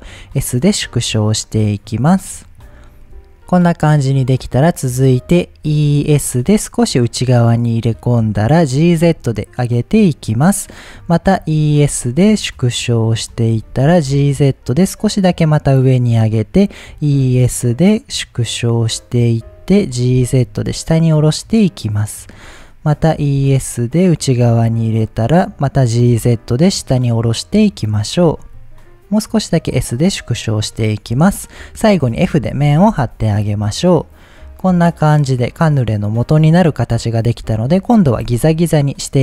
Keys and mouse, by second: 0.0 s, 1.9 click, 2.2-3.2 middle drag, 3.9 middle click, 5.6 e, 6.0 s, 7.6 click, 8.7 g, 8.9 z, 10.0-11.4 drag, 11.4 e, 11.7 s, 13.2 click, 13.6 g, 13.7 z, 15.6 click, 16.9 e, 17.2 s, 19.2 click, 19.8 g, 20.0 z, 22.1 click, 23.2 e, 23.4 s, 24.9 click, 25.8 g, 26.0 z, 27.9 click, 28.2 s, 29.6 click, 30.0 middle click, 32.0 f, 32.5 middle click, 34.4-36.4 middle drag, 36.6 middle click.